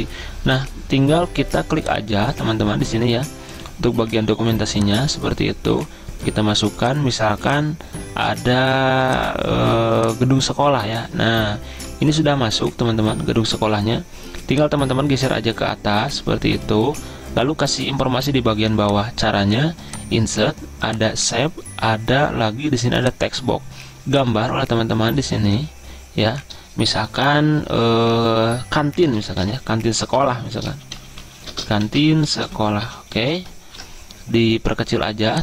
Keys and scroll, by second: 29.2-34.1 typing.